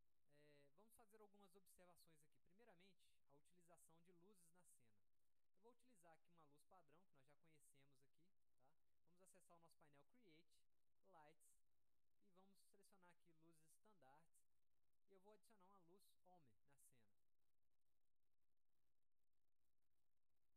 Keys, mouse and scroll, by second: 0.6 click, 2.1 alt+middle click, 2.7-3.0 scroll down 1, 3.4 scroll down 1, 3.8-4.8 alt+middle drag, 4.8 scroll up 1, 5.2 alt+middle click, 7.5-8.4 drag, 8.6 middle click, 10.2 click, 11.6 click, 13.0 click, 14.3 click, 14.8 alt+middle click, 16.4 middle click, 17.3 click, 18.0 alt+middle click, 19.4 click, 20.2 middle click.